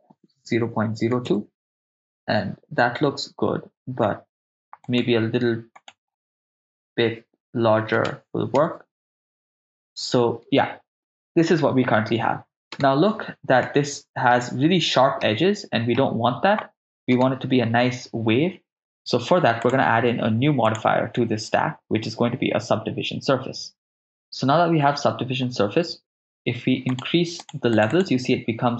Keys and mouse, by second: 4.9-8.6 drag, 12.8 KP_0, 13.7-14.3 middle drag, 15.3-16.0 middle drag, 17.1 KP_0, 19.7 click, 20.7-23.9 drag, 26.9 click, 27.4 click, 27.7 click.